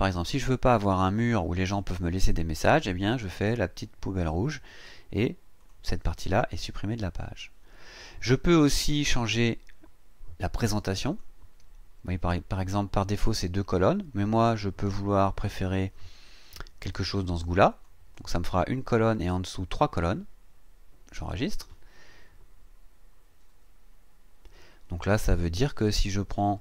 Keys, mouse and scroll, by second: 4.2 click, 5.6 click, 11.0 click, 17.7 click, 21.3 click, 24.6-25.0 scroll down 2, 25.2 scroll up 2, 26.4-26.6 drag.